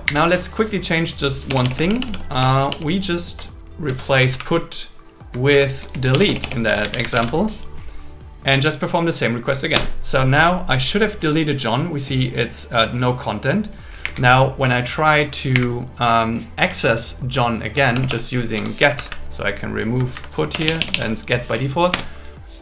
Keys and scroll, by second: 0.1 Up, 1.5 BackSpace, 2.2 BackSpace, 2.9 BackSpace, 3.9 Home, 4.2 Right, 5.8 Left, 6.2 BackSpace, 9.8 Return, 14.0 Up, 15.6 Up, 16.7 BackSpace, 17.7 BackSpace, 18.6 Home, 18.8 Right, 20.6 BackSpace, 21.9 Return.